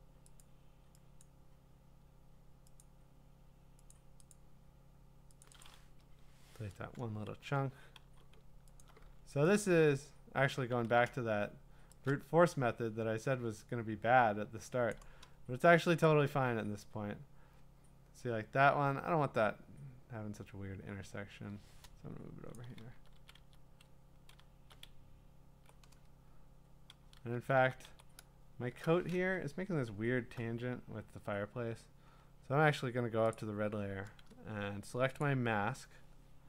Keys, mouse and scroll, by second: 0.4 click, 1.2 click, 2.8 click, 4.3 click, 4.4 click, 5.4 click, 5.6 click, 6.0 BackSpace, 7.4 ctrl+d, 8.0 v, 8.8 alt+click, 10.5 click, 10.7 ctrl+z, 14.9 click, 15.8 click, 15.9 click, 22.5-25.6 drag, 22.9 Down, 23.1 Down, 23.4 Down, 23.9 Left, 24.4 Down, 24.8-25.7 Right, 27.3 Down, 27.6 Down, 27.9 Right, 28.8 Return, 29.4-30.2 scroll, 32.1-33.3 scroll, 33.3 click, 35.2 click.